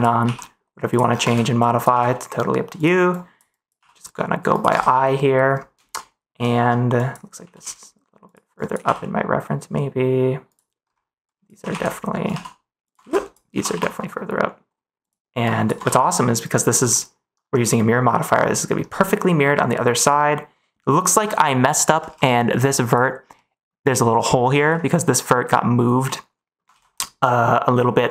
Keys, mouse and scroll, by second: 0.2 g, 0.8 click, 1.2 ctrl+s, 1.6 click, 1.8 g, 3.1 click, 3.5 click, 3.7 g, 4.4 click, 4.7 ctrl+s, 5.9 middle click, 7.0 click, 7.3 g, 7.5 x, 8.2 click, 8.5 click, 8.7 g, 10.4 click, 11.3 click, 11.5 g, 11.6 z, 12.2 y, 12.8 click, 12.9 ctrl+z, 13.1 click, 13.4 g, 13.6 y, 15.5 click, 15.8 ctrl+s, 16.1 middle click, 16.3 click, 16.3 middle click, 16.8 middle click, 17.7 click, 18.0 middle click, 19.2 middle click, 20.2 middle click, 21.3 middle click, 22.0 ctrl+s, 22.2 middle click, 23.3 middle click, 26.0 middle click, 26.6 ctrl+s, 26.9-28.0 middle drag.